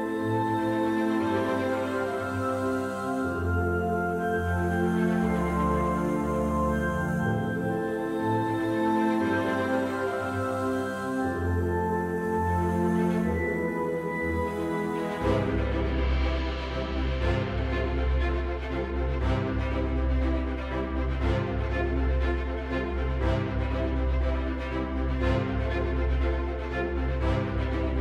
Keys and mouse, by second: 1.4 right click, 1.8 right click, 2.0 right click, 3.1 right click, 3.6 right click, 3.9 right click, 4.4 right click, 4.9 right click, 6.0 right click, 9.3 KP_1, 11.7-13.1 right drag, 14.2 right click, 19.0 right click, 20.9-25.7 right drag, 27.4-28.0 right drag.